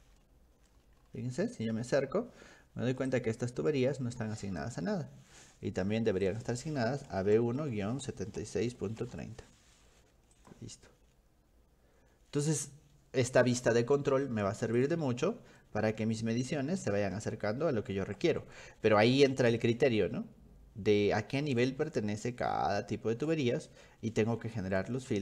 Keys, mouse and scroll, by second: 0.2 middle click, 1.0-1.8 scroll up 6, 3.1-4.6 drag, 6.3 click, 6.9-9.6 typing, 10.4 click, 14.8 click, 15.1 scroll down 2, 15.4 scroll up 2, 15.6 middle click, 16.5-18.2 middle drag, 18.4-21.6 middle drag, 21.9-23.3 middle drag, 23.6-24.8 middle drag, 25.1-25.2 scroll up 2.